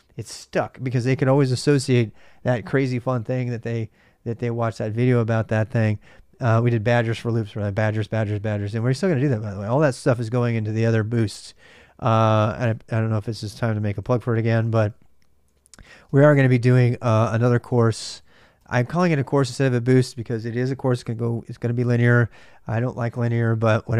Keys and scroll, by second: 13.5 ctrl+a, 14.2-16.2 typing, 17.3-18.4 typing.